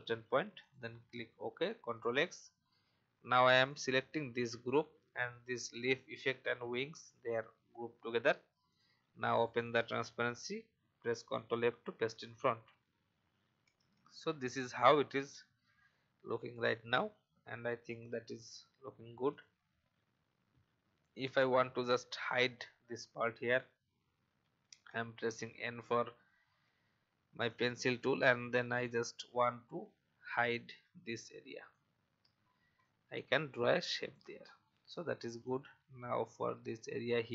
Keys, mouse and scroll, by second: 0.5 click, 1.6 ctrl+x, 3.7 click, 10.0 click, 11.4 ctrl+f, 13.7 alt+scroll up 1, 16.5 click, 19.3 click, 19.8-20.3 alt+scroll up 2, 24.2 n, 25.1 alt+scroll up 1, 26.6 alt+scroll up 1, 27.4-37.3 drag.